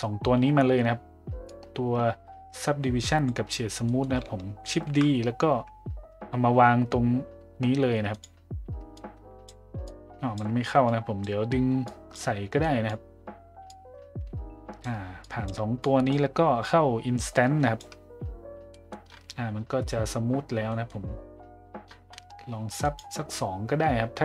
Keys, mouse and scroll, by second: 1.5-3.3 drag, 3.9 middle click, 4.8 shift+d, 9.0-9.5 drag, 9.8-10.4 drag, 10.9 click, 11.9 click, 12.6 click, 13.7-14.8 drag, 15.3 click, 15.8-16.1 drag, 16.7-17.8 drag, 18.7 middle drag, 20.7 middle drag, 22.8 click.